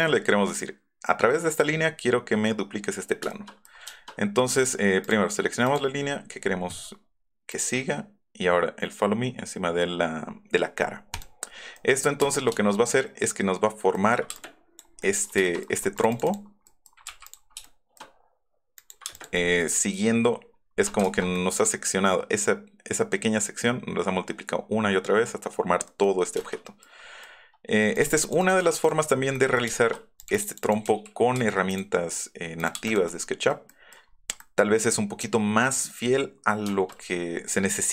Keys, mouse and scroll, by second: 3.2 shift+click, 3.7 middle click, 3.8 shift+click, 5.0 click, 5.6 click, 7.5 click, 11.1 click, 11.7 middle click, 12.1 scroll up 1, 12.2 space, 14.3 click, 14.3 space, 15.9 click, 16.1 click, 16.2 click, 17.1 m, 19.1 space, 19.3 middle click, 19.7 middle click, 19.8 Up, 20.5 click, 21.1 ctrl+z, 21.3 click, 25.8 middle click, 26.2 scroll down 1, 27.9 click, 28.4 click, 28.8 click, 29.9 middle click, 30.2 middle click, 30.3 click, 30.9 n, 31.2 Up, 31.5 m, 31.7 click, 32.5 click, 32.8 click, 33.1 middle click, 33.5 click, 33.9 click, 34.0 middle click, 36.6 shift+middle click.